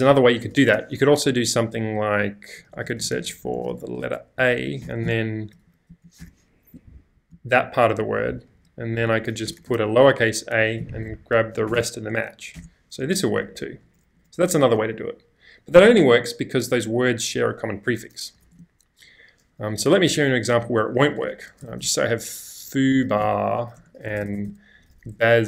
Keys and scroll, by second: 0.6 shift+;, 1.3 Up, 1.7 Left, 2.0 Left, 2.1 Left, 5.9 Left, 6.2 BackSpace, 6.7 Right, 7.0 Right, 7.1 Right, 8.6 Right, 8.9 Right, 9.4 BackSpace, 9.6 BackSpace, 9.6 a, 10.9 Right, 11.3 Right, 11.7 BackSpace, 11.7 1, 12.6 Return, 13.4 y, 13.8 y, 14.1 y, 14.5 y, 15.9 typing, 18.1-19.6 typing, 21.1-25.4 typing, 23.8 Return.